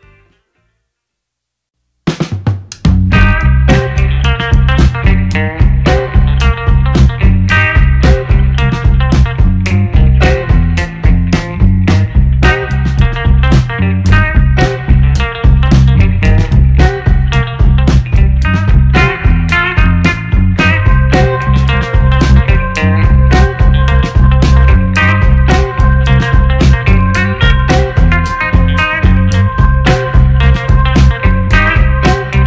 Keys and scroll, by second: 1.3 2, 1.5 4, 1.6 Return, 6.1 2, 6.2 Return, 17.8 Delete, 28.3 space.